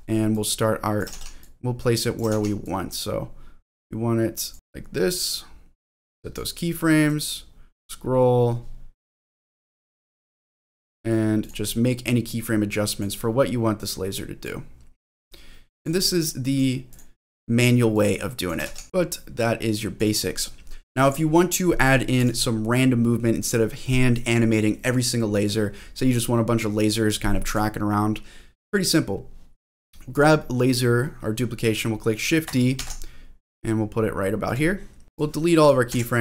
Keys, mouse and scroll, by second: 0.3 click, 1.2 ctrl+z, 1.4 click, 2.3 ctrl+z, 2.6-4.5 drag, 5.8 click, 7.1 click, 9.2-11.0 drag, 11.4 click, 12.1-13.3 drag, 13.8 click, 15.0 click, 16.5 click, 16.9 click, 17.9 click, 18.8 ctrl+z, 18.8-20.0 drag, 22.2 click, 27.5 click, 30.1 click, 32.8 shift+d, 34.4 click, 35.0 ctrl+z, 35.1 click, 35.9 Delete.